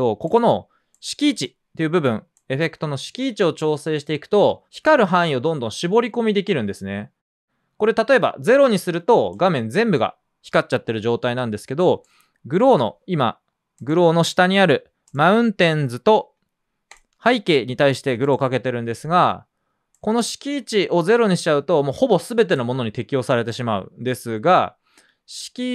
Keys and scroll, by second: 11.3 typing, 20.7 typing.